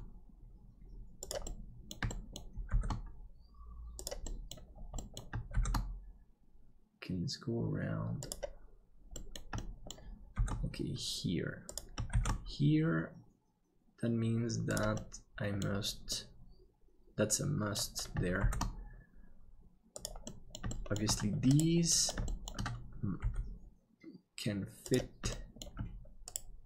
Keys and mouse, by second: 1.5 middle click, 2.1 shift+middle click, 4.3 middle click, 5.0 middle click, 9.2 middle click, 9.6 shift+middle click, 10.3 shift+d, 14.9 middle click, 16.1-17.7 middle drag, 18.4 shift+d, 20.3 middle click, 20.7 shift+middle click, 21.9 middle click, 22.2 shift+middle click, 23.2 g, 25.3 middle click.